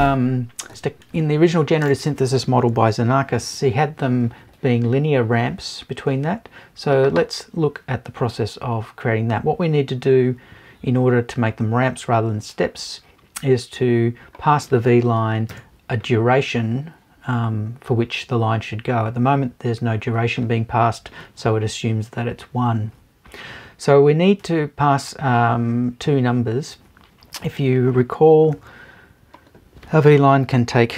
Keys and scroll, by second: 15.5 BackSpace.